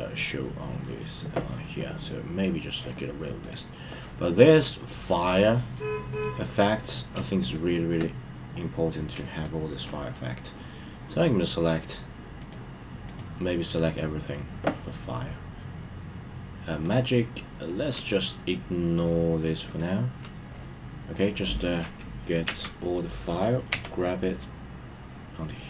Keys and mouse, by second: 0.1 click, 6.2 click, 7.5 shift+click, 9.4 shift+click, 12.4 click, 13.0 click, 16.8 click, 19.6 shift+click, 22.4 KP_1, 23.7 g.